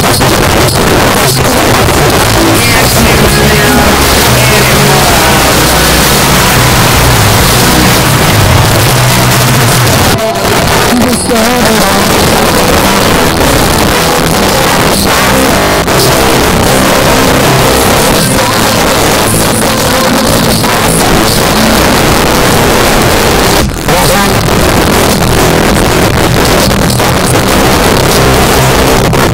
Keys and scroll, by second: 8.6 Page_Down.